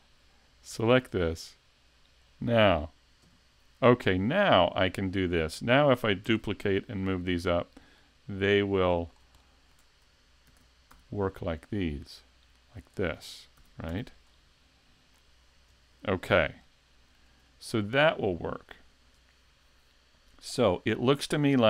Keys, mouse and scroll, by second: 0.7 a, 2.2 shift+click, 3.3 KP_3, 4.3 shift+middle click, 5.0-5.5 scroll up 1, 6.3 shift+d, 8.8 click, 9.1-9.6 scroll down 2, 9.4 shift+middle click, 9.8 shift+scroll up 1, 10.5 shift+d, 12.9 click, 13.1 scroll down 2, 13.6 z, 13.9 a, 14.3 middle click, 15.7 KP_5, 16.7 shift+middle click, 17.5 middle click.